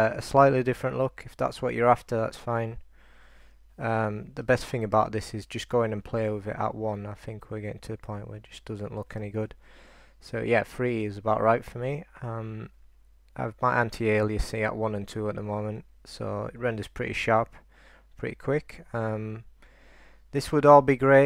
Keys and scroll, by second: 4.6 super+r, 9.6 super+r.